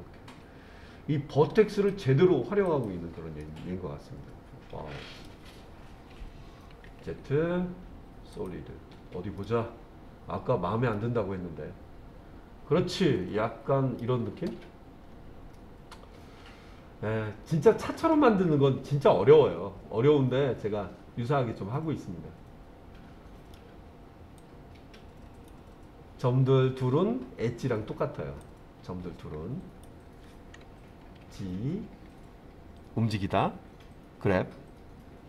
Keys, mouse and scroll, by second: 1.7 click, 2.7 click, 3.4-5.3 middle drag, 6.9 z, 9.4 middle click, 10.9-14.0 middle drag, 15.0-15.5 scroll down 2, 15.5-23.5 middle drag, 24.4-25.5 drag, 28.5-29.9 drag, 31.2 g.